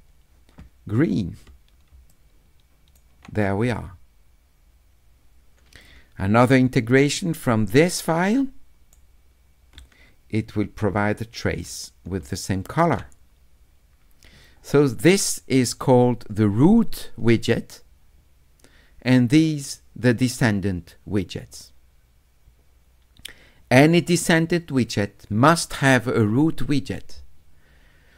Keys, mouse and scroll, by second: 2.1 shift+right click, 6.2 middle click, 6.4 middle click, 7.4 s, 7.9-8.9 right drag, 10.7 click, 12.3 shift+right click.